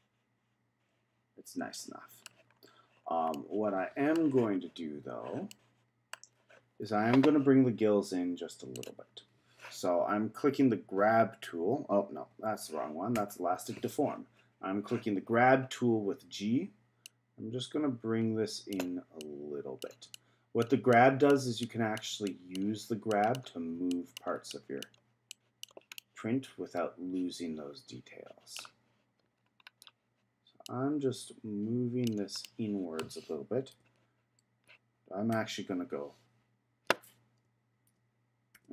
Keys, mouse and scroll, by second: 2.5-3.3 scroll up 6, 3.3 middle click, 4.2-5.5 scroll down 1, 5.5-8.5 middle drag, 8.7 click, 13.1 g, 17.1-26.0 drag, 26.0-29.0 middle drag, 29.4-30.6 scroll down 3, 30.6-32.4 drag, 32.4-33.7 middle drag, 33.7 KP_1, 35.3 KP_3, 37.9 shift+KP_3, 38.5 shift+KP_3.